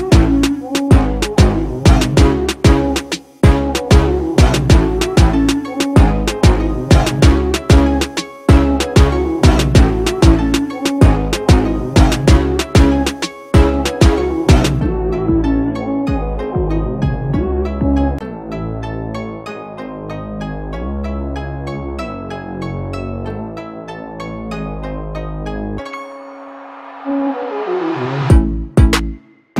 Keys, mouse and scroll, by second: 4.4 Escape, 10.8 alt+click, 12.7 alt+click, 15.1 alt+click, 17.0 alt+click, 28.3 Return.